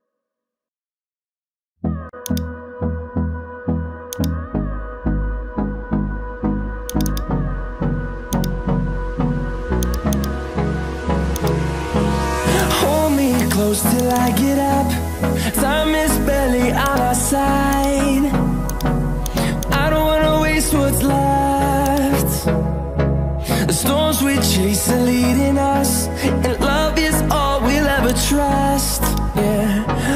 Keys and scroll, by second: 5.5 ctrl+d, 29.8 ctrl+alt+z.